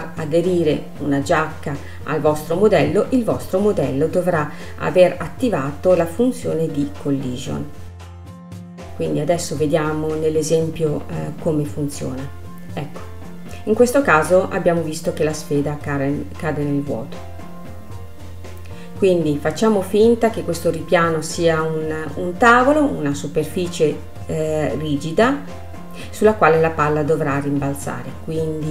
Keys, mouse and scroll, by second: 0.2-1.3 scroll up 1, 1.3-2.9 scroll up 1, 2.9-6.0 drag, 10.7-12.4 scroll down 1, 12.4 space, 13.7-15.6 drag, 15.6-17.8 middle drag, 17.8 click, 19.0 click, 19.8-20.3 scroll up 2, 20.3-21.9 middle drag, 21.9-24.9 scroll down 1.